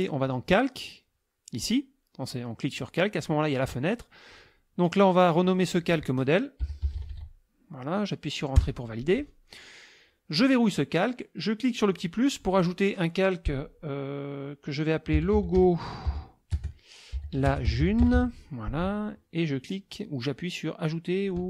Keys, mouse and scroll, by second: 0.2 click, 2.7 click, 4.3 click, 5.4 click, 6.4-8.1 typing, 8.6 Return, 10.4 click, 11.9 click, 14.9-18.6 typing.